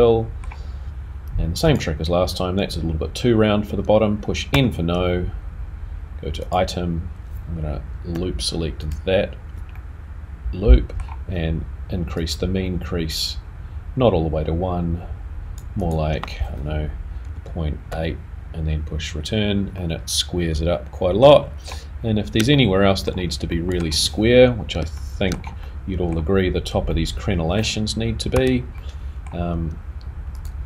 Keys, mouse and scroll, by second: 1.7 click, 4.5 n, 6.4 click, 8.8 alt+click, 9.7 middle click, 12.8 click, 19.7 middle click, 21.4-22.3 scroll down 1, 22.3 scroll down 2, 22.5 shift+middle click, 23.8 shift+middle click, 24.3-24.6 scroll up 2, 25.0 shift+middle click, 25.6 middle click, 26.9 middle click, 28.4 3, 28.7 middle click.